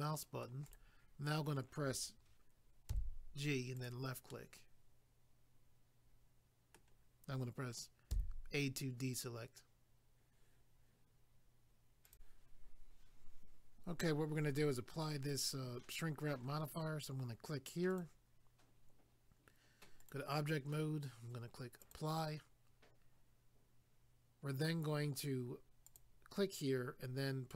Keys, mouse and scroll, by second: 0.7 right click, 0.8 right click, 3.8 click, 3.8 click, 4.3 middle click, 8.1 a, 12.1 click, 12.1 click, 17.9 click, 18.0 click, 20.0 click, 20.1 click, 21.8 click, 21.9 click, 25.9 click, 26.0 click.